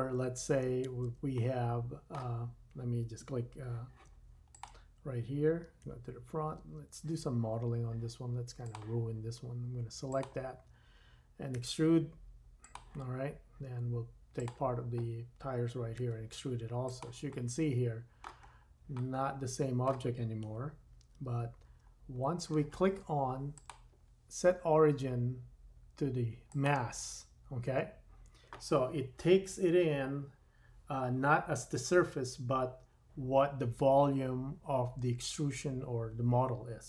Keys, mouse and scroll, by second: 0.0 super+z, 0.9 super+z, 1.4 middle click, 4.5 click, 4.7-5.9 middle drag, 5.9 KP_1, 6.5 Tab, 8.6-10.2 drag, 11.5 e, 14.3 click, 16.0 e, 17.4-18.5 middle drag, 18.4-19.0 scroll down 3, 19.1 middle click, 19.3-23.5 middle drag, 20.4 KP_1, 21.1 Tab, 21.7 scroll up 2, 23.5-36.8 drag.